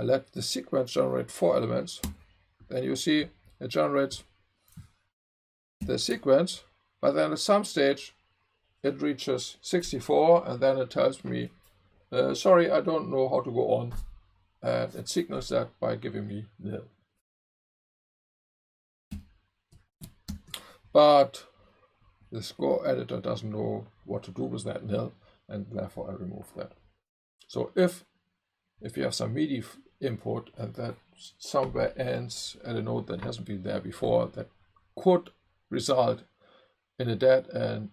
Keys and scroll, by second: 2.0 v, 5.8 alt+super+8, 20.4 alt+super+8.